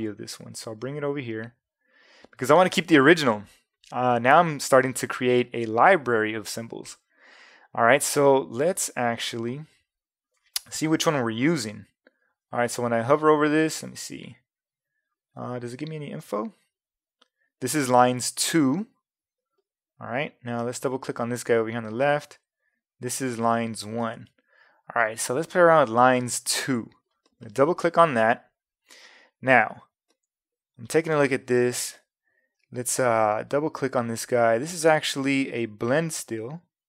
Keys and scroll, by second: 35.9 a.